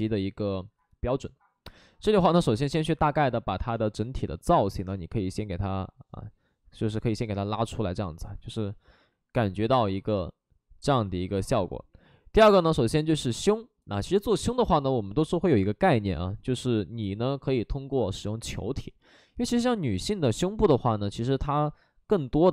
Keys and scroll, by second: 3.7 space.